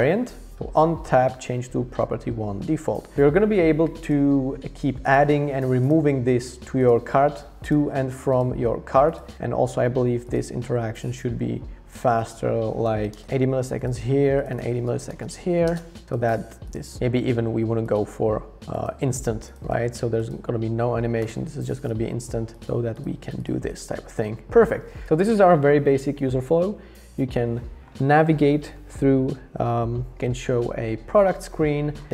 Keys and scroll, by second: 13.2 Return, 14.3-15.6 typing.